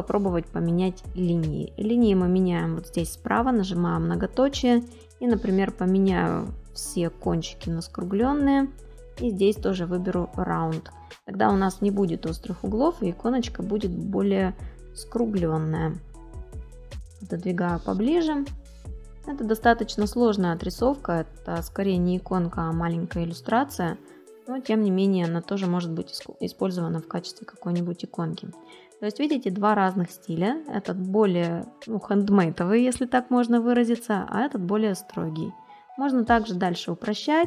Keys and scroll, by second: 14.5 ctrl+=, 15.6 space, 25.2 space, 34.6 space.